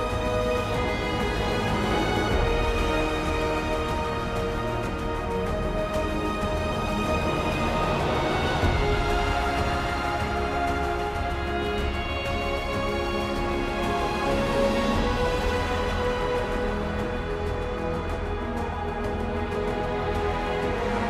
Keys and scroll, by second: 4.8 ctrl+t, 7.2 ctrl+e, 10.9 ctrl+j, 11.9 ctrl+t, 16.4 ctrl+t.